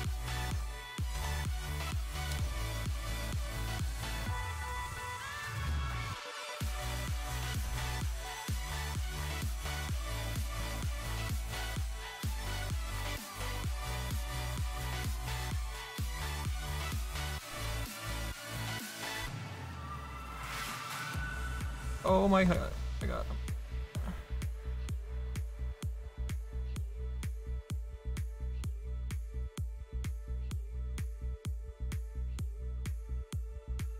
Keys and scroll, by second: 0.2 space, 1.1 Return, 22.6 ctrl+z.